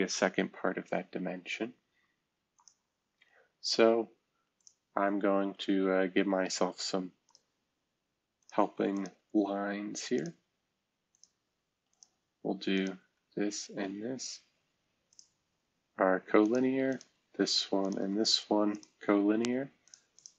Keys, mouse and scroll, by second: 0.7 shift+F2, 11.6 Escape.